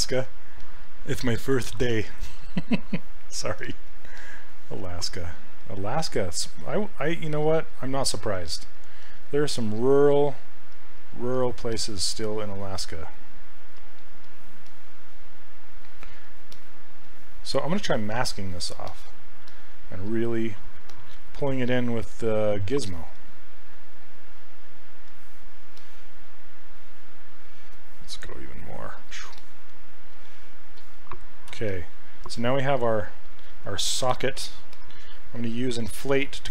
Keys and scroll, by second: 3.6 s, 21.3 w, 31.5 q, 35.5 s.